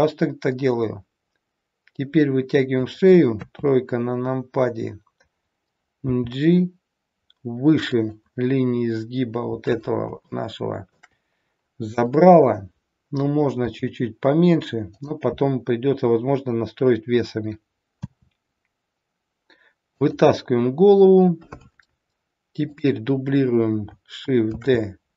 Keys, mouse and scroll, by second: 3.4 KP_3, 6.0 g, 10.3 shift+middle click, 13.6 g, 18.0 e, 22.6 click, 24.4 shift+d.